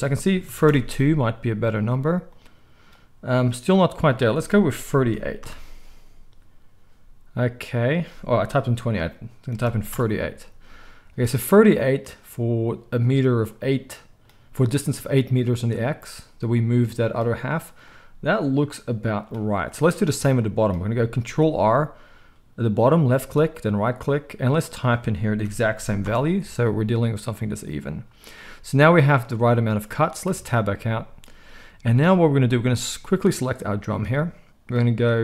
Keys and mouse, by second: 21.2 ctrl+r, 30.2 Tab, 32.0-35.2 middle drag.